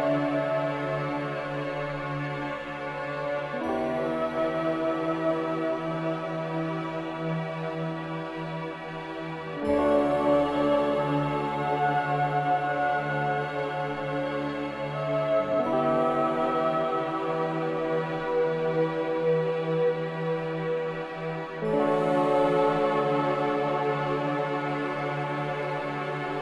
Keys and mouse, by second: 3.7 ctrl+z, 4.0 ctrl+z, 4.2 ctrl+z, 4.6 ctrl+z, 4.8 ctrl+z, 5.1 ctrl+z, 6.9 ctrl+r, 20.1 ctrl+r.